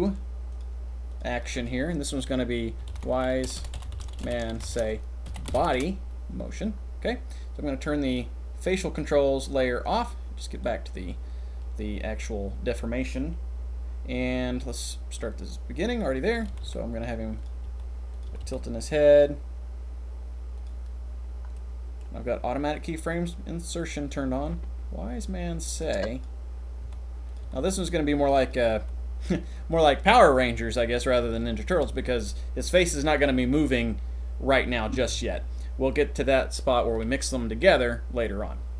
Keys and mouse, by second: 0.5 click, 1.1-5.7 drag, 3.5 BackSpace, 9.8 click, 10.5 click, 16.6-18.6 typing, 21.6 click, 24.5-26.2 drag, 26.8 r, 27.4 r, 27.6 r, 28.7 r, 31.2-31.8 shift+middle drag.